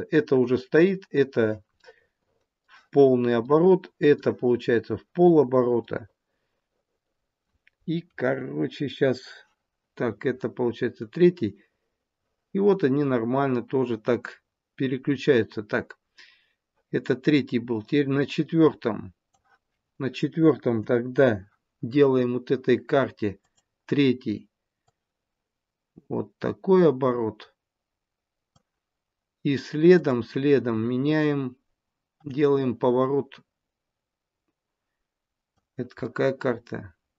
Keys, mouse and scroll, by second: 1.6 middle click, 3.4 middle click, 4.7 scroll down 1, 5.8 middle click, 11.0 click, 20.6 KP_7, 23.4 click, 24.6 click, 29.9 click, 32.2 click, 36.0 middle click.